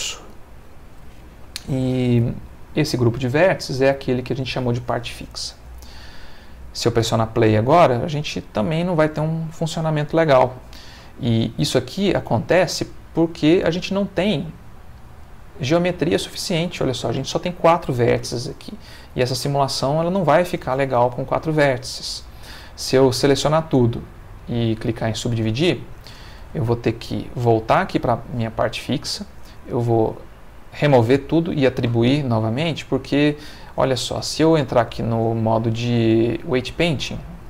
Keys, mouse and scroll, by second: 2.5 click, 4.0 click, 5.5 middle click, 6.2 middle click, 6.8 middle click, 7.1 space, 13.2 Escape, 13.9 Tab, 23.0 a, 23.6 right click, 24.3 click, 27.1 click, 32.7 click, 34.7 ctrl+Tab, 36.4 click.